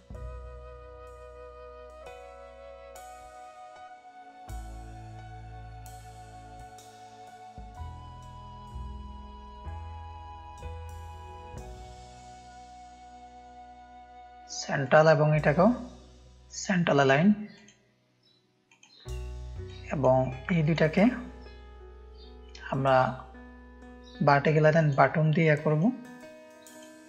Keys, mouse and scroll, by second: 1.1 click, 1.7-2.2 drag, 2.8-3.2 drag, 3.4 click, 5.2 shift+click, 5.6 click, 5.9 ctrl+space, 5.9 ctrl+click, 6.7 drag, 7.0 shift+click, 8.8 click, 9.3 shift+click, 10.5 click, 11.1 shift+click, 12.1 space, 12.5 click, 14.0-15.0 drag, 17.5-18.8 drag, 19.6-20.0 drag, 24.7-27.0 drag.